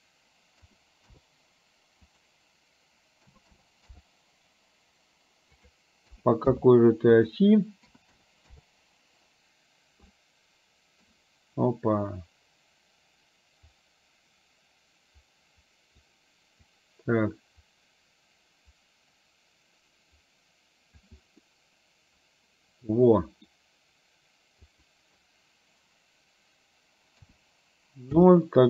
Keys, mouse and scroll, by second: 2.1-4.1 drag, 5.6-6.7 drag, 7.1-8.6 drag, 10.2 middle click, 11.1 scroll down 1, 13.8-16.0 drag, 16.7-21.0 drag, 21.5-23.7 middle drag, 24.7-28.4 drag.